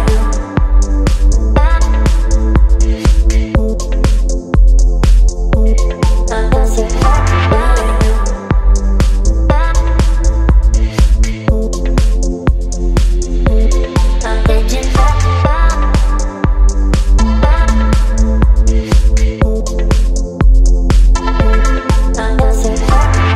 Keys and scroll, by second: 18.7 ctrl+t.